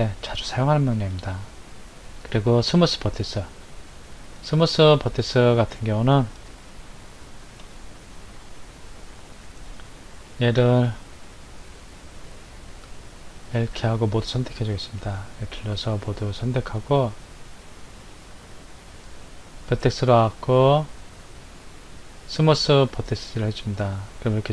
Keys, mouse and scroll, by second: 4.8 click, 5.4-6.6 scroll down 5, 6.6-7.8 shift+middle drag, 7.8-9.5 scroll up 2, 9.5 scroll down 1, 12.4 l, 16.4-17.6 scroll up 1, 18.9-22.1 drag.